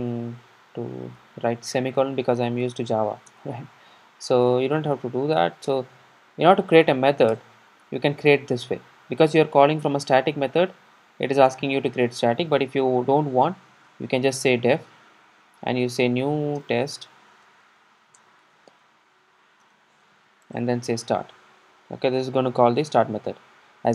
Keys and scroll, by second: 3.4 alt+Return, 7.7 Return.